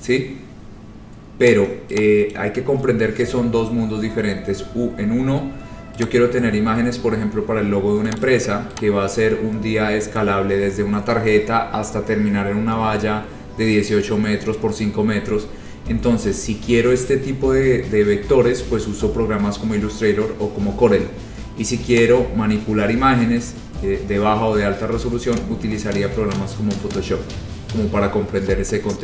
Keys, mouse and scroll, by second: 0.1-1.2 scroll, 1.7 click, 2.4 click, 5.3-5.8 scroll, 6.2 click, 8.3 click, 10.2 click, 13.8 click, 16.0-21.0 middle drag, 16.0-16.5 scroll, 21.4-21.9 scroll, 22.1 click, 22.7-25.7 scroll, 26.1 scroll, 27.7-29.0 scroll.